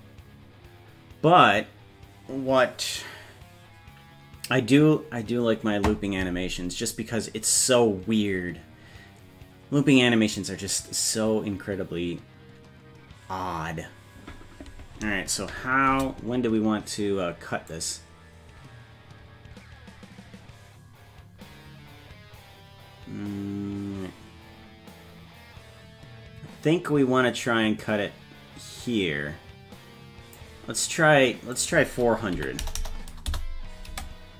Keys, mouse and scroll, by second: 15.9 space, 17.8-30.4 drag, 31.6-33.9 drag, 32.8 KP_0, 33.9 space.